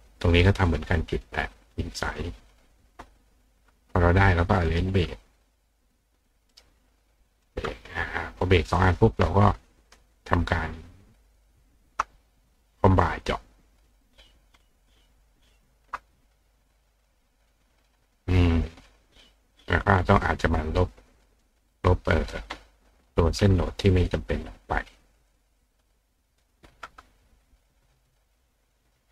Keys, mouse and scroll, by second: 0.0 click, 2.1 click, 3.7 click, 4.7 right click, 5.8 click, 6.3 click, 6.5 right click, 7.4 click, 8.0 click, 8.8 click, 11.3 shift+click, 13.2 click, 13.9 click, 15.6 shift+click, 17.4 click, 20.7 click, 21.4 click, 24.1 click, 25.3-26.5 drag, 28.0 click, 28.2 click.